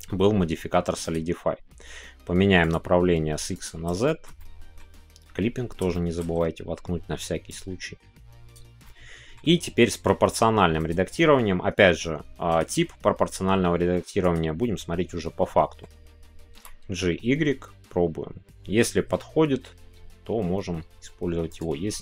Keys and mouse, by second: 2.6-3.9 drag, 4.1 shift+middle click, 4.4 middle click, 5.9 shift+click, 6.1 middle click, 6.4 middle click, 8.5 click, 8.8 middle click, 10.7-14.4 drag, 14.6-21.5 middle drag, 21.5 right click, 21.9 middle click.